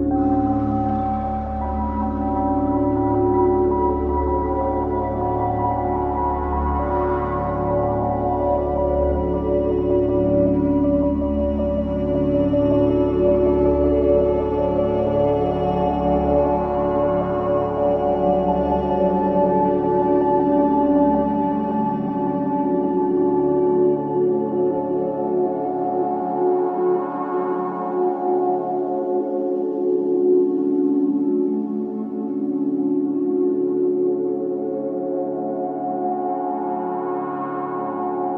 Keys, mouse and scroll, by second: 1.1-2.4 scroll down 1, 2.4-3.1 scroll up 1, 3.1 click, 5.0 alt+click, 5.5 ctrl+z, 6.3 click, 7.9 alt+click, 9.1 alt+click, 9.9 ctrl+z, 10.5 alt+click, 11.2-13.2 scroll down 1, 13.5-15.2 scroll up 1, 19.5 click, 21.2 alt+click, 22.8 ctrl+z, 24.7 click, 28.1 alt+click, 28.5 alt+right click, 29.0 alt+click, 30.2 alt+right click, 30.5 alt+click, 30.9 alt+right click, 31.3 alt+click, 31.6 alt+right click, 32.1 click, 32.3 alt+click, 32.6 alt+right click, 32.9 alt+click, 33.4 alt+middle click, 33.9 alt+click, 34.4 alt+middle click, 35.2 alt+click, 36.1-38.3 alt+right drag.